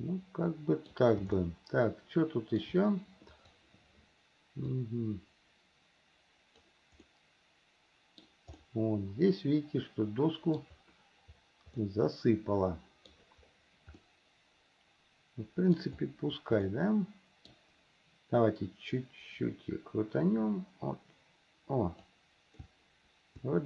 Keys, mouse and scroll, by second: 1.6-2.9 shift+middle drag, 3.5 click, 5.0-7.0 drag, 7.2-8.4 middle drag, 8.8-10.9 middle drag, 12.0-13.3 middle drag, 14.2-16.0 middle drag, 16.9 middle click, 18.6 click, 19.1-22.3 drag, 22.8-23.6 shift+middle drag.